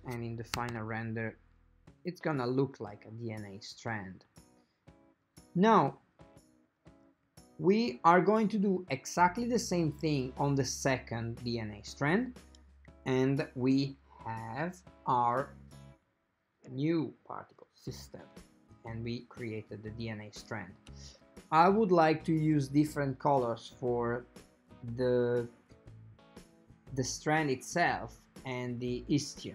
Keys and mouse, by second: 0.7 a, 0.8 a, 12.4 ctrl+a, 15.1-17.4 middle drag.